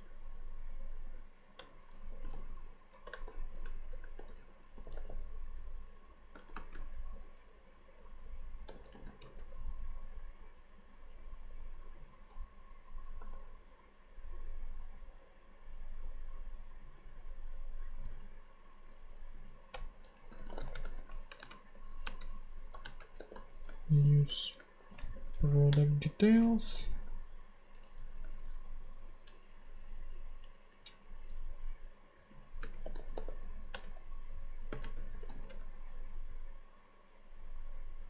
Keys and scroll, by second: 1.5 Return, 1.8-5.4 typing, 6.4 shift+;, 6.5 shift+space, 8.4-9.7 typing, 13.2 ;, 19.7 Return, 19.9-25.5 typing, 21.7 Right, 25.7 Return, 26.4 super+Return, 26.5 super+Right, 26.9 super+;, 27.8 Left, 28.8 shift+[, 28.9 shift+], 29.8 shift+Down, 30.3 Down, 30.7 Up, 32.6-35.7 typing, 33.7 Return.